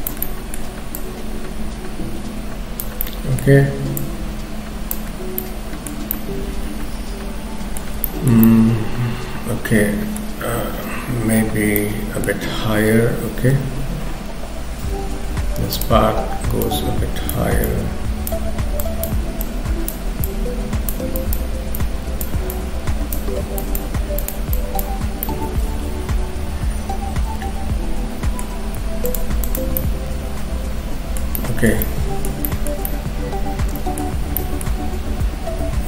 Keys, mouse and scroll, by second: 0.3 middle click, 1.0 click, 3.0 middle click, 4.0 click, 5.1-6.0 scroll down 3, 5.4 middle click, 6.1 middle click, 8.1 shift+middle click, 8.5 middle click, 10.5 KP_3, 11.8 shift+middle click, 13.5 k, 13.9-14.9 scroll up 2, 14.9 f, 16.7 click, 17.7 click, 20.3 click, 21.8 click, 24.2 click, 25.1-26.8 scroll down 4, 25.3 middle click, 28.6 scroll up 2, 29.1 shift+click, 29.5 shift+click, 29.8 middle click, 31.3 shift+middle click, 31.8 middle click, 32.5 shift+middle click, 33.3 middle click, 34.1 scroll up 2, 34.4 middle click, 34.9-35.5 scroll up 1.